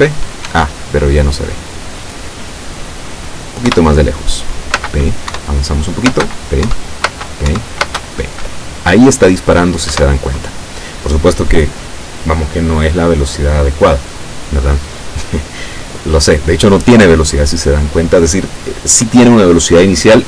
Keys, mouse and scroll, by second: 0.6 Escape, 1.6-2.0 scroll down 2, 2.5 scroll down 2, 3.7 p, 4.9 space, 5.4 Up, 6.2 space, 6.8 Up, 7.1 space, 7.6 Up, 7.9 space, 10.0 Escape.